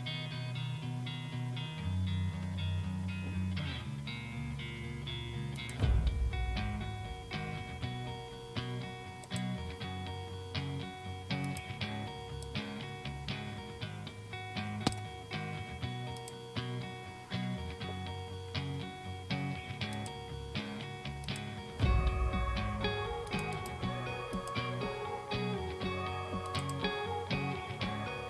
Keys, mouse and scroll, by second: 5.6 click, 7.0-7.6 scroll down 1, 9.4 click, 11.5 click, 16.2 click, 20.0 click, 21.3 click, 23.3 click, 24.4 click, 26.5 click.